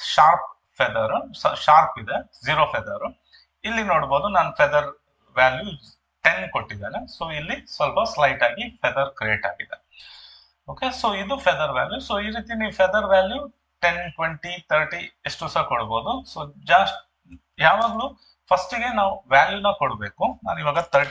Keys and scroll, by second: 17.9 ctrl+d, 20.9 3, 21.0 0.